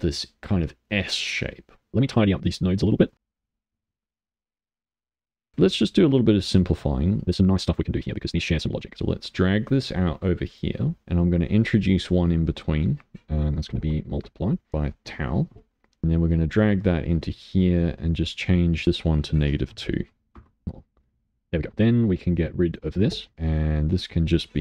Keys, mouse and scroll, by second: 1.9-3.1 middle drag, 3.2 click, 3.3 middle click, 3.6 g, 3.9 click, 4.1 middle click, 4.2 g, 4.3 middle click, 4.5 g, 4.9 click, 5.1 click, 5.3 middle click, 5.4-7.1 middle drag, 7.1 click, 8.0 middle click, 10.8 middle click, 11.6-14.2 drag, 14.7-16.0 drag, 16.3 click, 18.8-21.7 drag, 23.3 Delete, 23.9-24.6 drag.